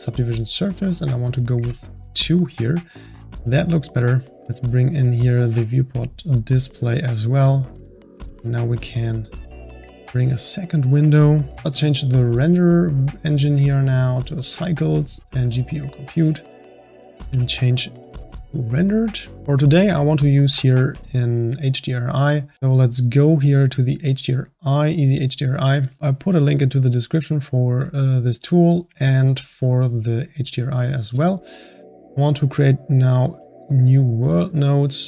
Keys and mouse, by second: 1.0-2.1 drag, 3.4 click, 4.6 click, 5.6-11.6 drag, 11.6 n, 12.4-13.1 drag, 13.5-19.3 drag, 17.2 z, 22.5-23.5 drag, 23.9-25.4 drag, 28.5-35.0 drag.